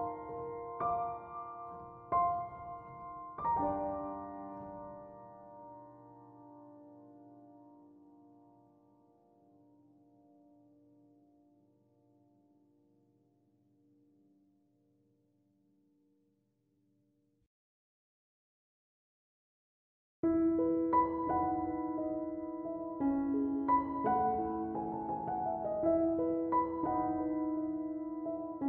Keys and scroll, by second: 12.0 BackSpace.